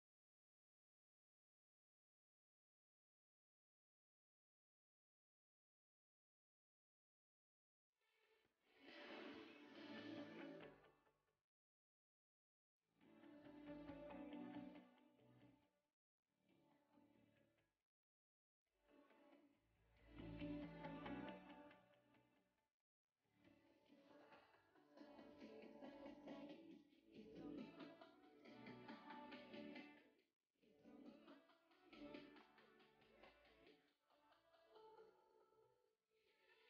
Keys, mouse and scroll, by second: 3.2 r, 7.9 c, 13.0 a, 18.6-24.3 shift+middle drag, 24.3 c, 31.0-32.6 scroll down 1.